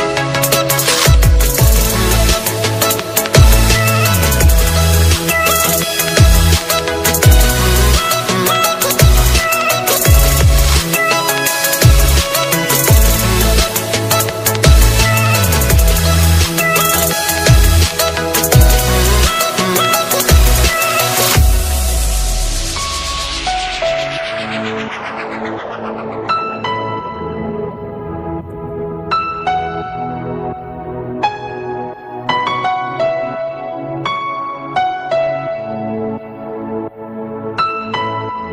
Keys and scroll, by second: 5.8 alt+space, 6.9 ctrl+space, 17.3 alt+space, 33.2 ctrl+space, 35.2 alt+space.